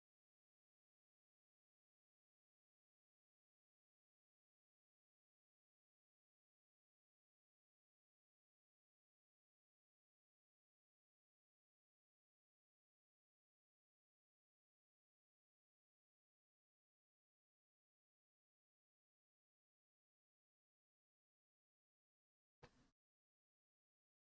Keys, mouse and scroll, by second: 0.4 click, 0.9 Escape, 1.5 click, 2.4 click, 2.7 middle click, 3.8 click, 4.2 middle click, 4.2-4.5 scroll, 5.5 click, 6.3 click, 8.8-9.8 drag, 11.4 click, 11.5 Escape, 11.8 Escape, 13.3 click, 13.4 Escape, 13.6-14.1 scroll, 13.8 Escape, 14.1 Escape, 14.7 click, 16.9 click, 18.3 click, 18.6 middle click, 18.6-19.5 scroll, 19.4 Escape, 19.7 Escape, 20.8 click, 21.0 Escape, 21.1 Escape, 21.5 Escape, 21.8-22.3 scroll down 5, 22.3-23.0 scroll up 7, 23.0 scroll down 1, 24.0 click.